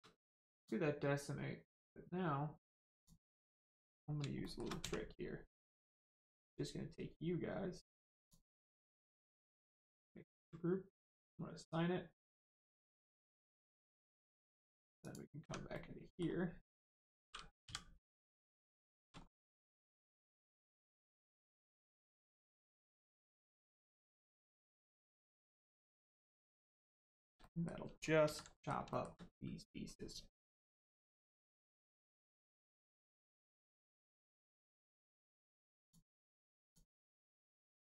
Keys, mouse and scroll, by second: 0.5 click, 2.9 click, 4.4 shift+middle click, 4.8 middle click, 5.5 click, 8.2 click, 11.0 click, 15.0 click, 15.4 Tab, 15.7 middle click, 18.1 middle click, 18.5 scroll up 1, 18.7 shift+middle click, 19.1-19.5 scroll up 1, 19.5 middle click, 20.9 click, 24.8 click, 26.5 middle click, 27.0 shift+middle click, 27.4 middle click, 28.2 alt+z, 28.5 middle click, 28.8 shift+middle click, 31.8 middle click, 32.8 shift+middle click, 33.7 middle click, 33.8 middle click, 34.0 scroll up 1, 35.8 click.